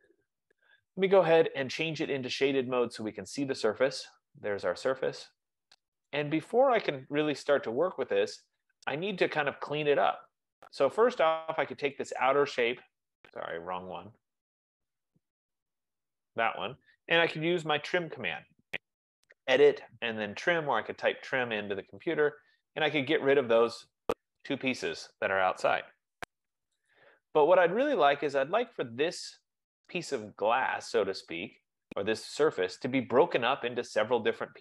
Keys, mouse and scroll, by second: 0.5 click, 2.3 click, 6.8 right click, 7.2 middle click, 8.1 middle click, 8.8 click, 12.3 click, 13.8 click, 15.9 click, 18.6-19.3 typing, 20.6-21.4 typing, 22.4 click, 23.8 click, 26.1 Return, 27.1 click, 29.0 click.